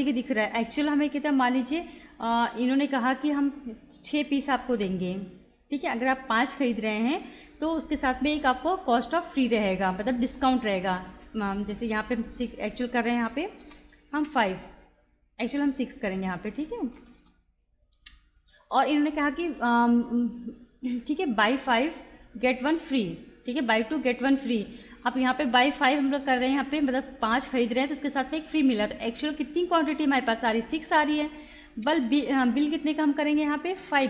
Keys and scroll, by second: 4.7 6, 13.6 BackSpace, 14.2 5, 15.9 6, 17.0 BackSpace, 18.0 6, 31.9 Return, 33.9 5.